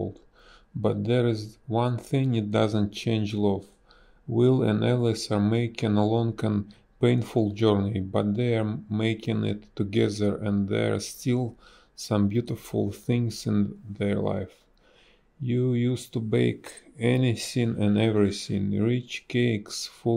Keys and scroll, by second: 5.9 space, 7.5 space, 10.5 ctrl+z, 13.3 ctrl+z.